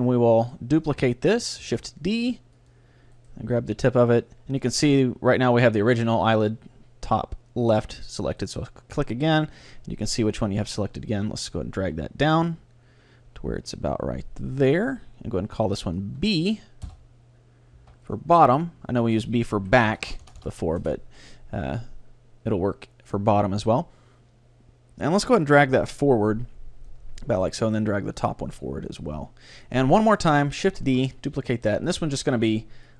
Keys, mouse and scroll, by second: 0.6-2.3 right drag, 1.7 shift+d, 2.8-4.7 drag, 3.2-4.9 right drag, 4.3 middle click, 8.4-10.2 right drag, 11.2 g, 14.9-17.6 drag, 20.1 BackSpace, 20.3 BackSpace, 22.0-22.6 scroll up 1, 22.6-23.5 scroll down 1, 23.5 middle click, 23.7 middle click, 23.9 middle click, 25.2-27.0 drag, 27.4-31.4 right drag, 28.2-30.1 drag, 28.2-29.5 middle drag, 29.7 middle click, 30.9 shift+d, 31.4-32.9 drag.